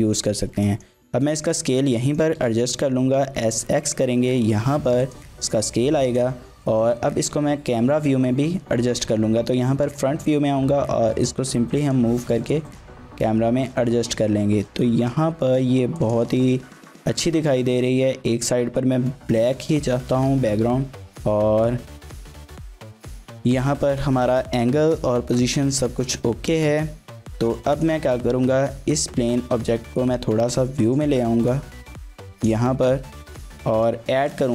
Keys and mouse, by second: 0.6 click, 1.4 click, 2.1 shift+click, 2.4 s, 2.6 x, 5.0 click, 5.4-6.2 drag, 9.1 KP_1, 10.1 g, 11.8 click, 14.7 g, 16.0 click, 27.7 click, 28.4 KP_7, 29.4 g, 29.7 y, 32.4 click, 33.3 shift+drag, 33.6-33.9 drag, 34.1 shift+a.